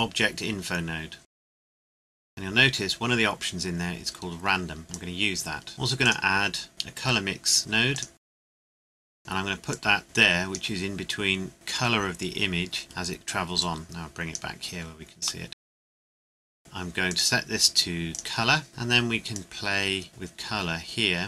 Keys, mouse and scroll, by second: 1.5 scroll down 1, 1.7 scroll up 1, 1.9 g, 2.1 click, 2.2-3.6 scroll up 1, 4.5 scroll down 1, 4.9 click, 6.0 click, 7.9 click, 13.6 click, 14.7 scroll down 1, 15.4 middle click, 15.7 click, 15.9 scroll up 1, 16.1 click.